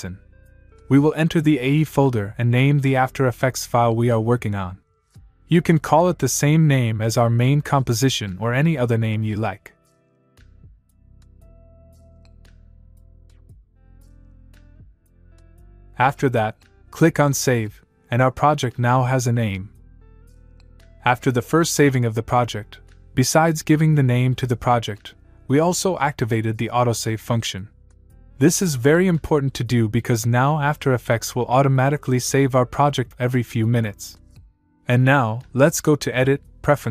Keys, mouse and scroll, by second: 36.0 click.